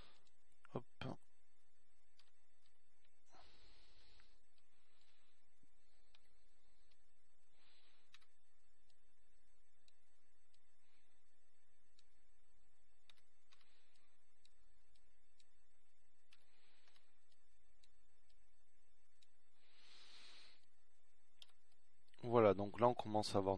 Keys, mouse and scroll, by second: 0.6 KP_1, 1.8 z, 5.5 middle click, 6.8 z, 7.2 z, 8.5 Tab, 10.8 a, 12.8 b, 16.7 click, 17.8 a, 18.3 b, 19.7-21.2 drag, 21.2 a, 21.7 b.